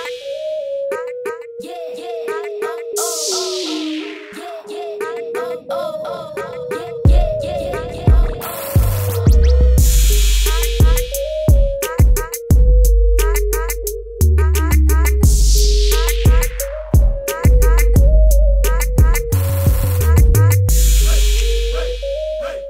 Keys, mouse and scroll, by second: 1.4 ctrl+KP_0, 3.0 click, 4.1 alt+BackSpace, 5.2 ctrl+-, 6.2 click, 12.1 click, 14.2 ctrl+a.